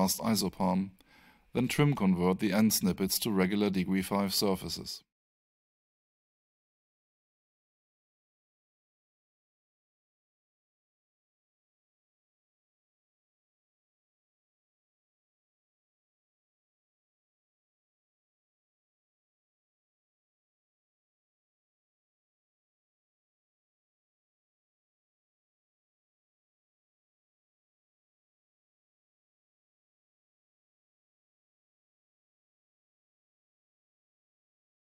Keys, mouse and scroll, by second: 1.5 space, 2.2 alt+shift+middle click, 4.1 click, 5.4 space, 6.1 alt+shift+space, 6.2 alt+shift+middle click, 7.0 click, 8.3 space, 10.2 double click, 10.4 click, 13.8 click, 17.9 click, 19.4 alt+shift+right click, 20.3 alt+shift+middle click, 22.1 alt+shift+right click, 26.3 3, 26.8 click, 27.4 3, 28.2 Tab, 30.3 3, 31.1 click, 32.7 3, 33.9 Return, 34.9 alt+Return.